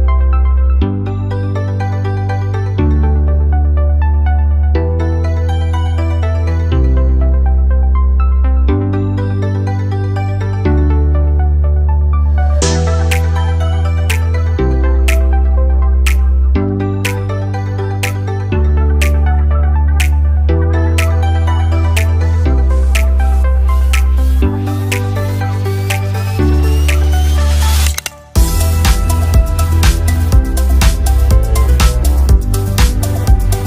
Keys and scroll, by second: 29.2 ctrl+v.